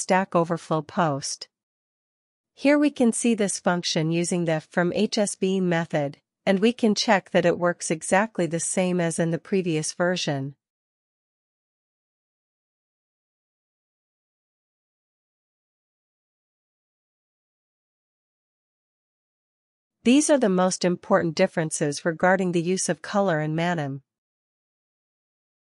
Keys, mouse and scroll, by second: 0.3-1.6 drag, 1.9 typing, 3.3-9.5 typing, 11.6-17.0 typing, 17.4 Return, 23.3 alt+q.